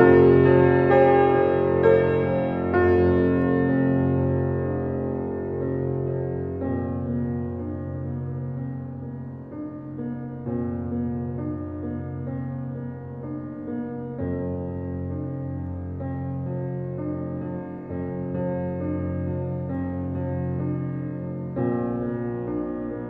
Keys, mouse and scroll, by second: 1.4 shift+a, 2.7 g, 4.5 shift+middle drag, 4.7 scroll up 1, 4.9 shift+middle click, 5.6 g, 6.5 s, 8.3-8.7 scroll up 5, 8.7 shift+middle click, 8.9 Tab, 9.5 ctrl+r, 10.7 click, 10.9-12.0 middle drag, 12.0 g, 13.4 click, 13.9 g, 16.0 ctrl+e, 17.0 ctrl+r, 20.2 g, 22.2 g.